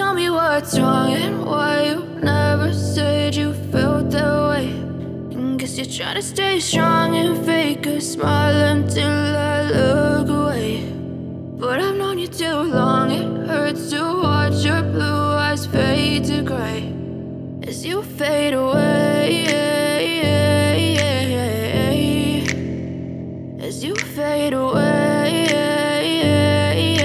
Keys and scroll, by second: 1.1 =, 2.7-4.4 typing, 4.4 Tab, 5.7 Return, 7.4-10.2 typing, 10.6 Tab, 11.8 Return, 18.0-24.8 typing.